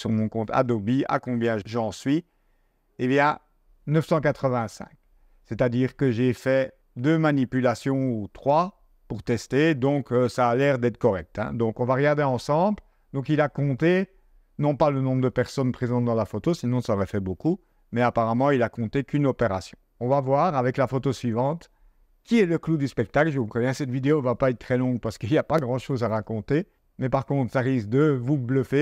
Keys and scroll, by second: 5.2 super+Tab, 12.4 super+Tab, 20.1 super+Tab.